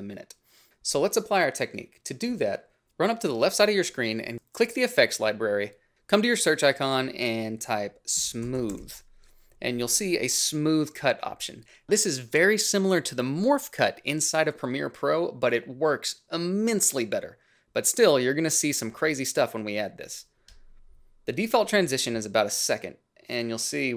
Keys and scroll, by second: 7.9-9.0 typing.